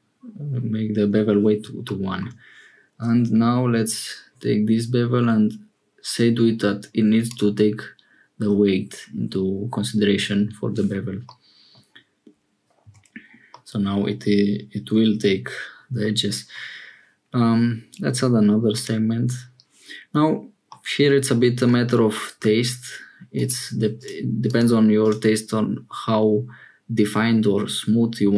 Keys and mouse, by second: 11.3 middle click, 12.8 Tab, 13.5-16.1 middle drag, 18.7 middle click, 20.7-21.7 middle drag, 23.9 click.